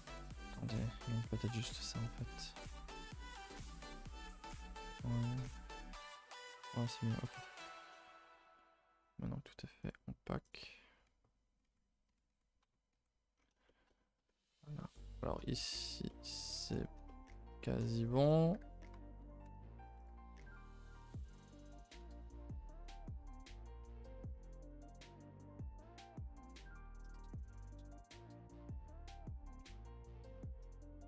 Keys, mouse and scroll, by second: 0.2 click, 1.5-1.8 right drag, 1.8 a, 3.4 u, 7.3 a, 8.4 n, 9.9 click, 10.9 n, 11.6 n, 13.0 n, 13.3-13.6 scroll down 4, 13.6-18.2 shift+middle drag, 18.2 click, 18.5 h, 19.5 ctrl+z, 20.0 click, 20.5 click, 22.4 click, 22.9 click, 23.8 a, 23.9 a, 24.2 click, 24.7 click, 25.5 click, 26.0 g, 28.0 click, 28.1 g.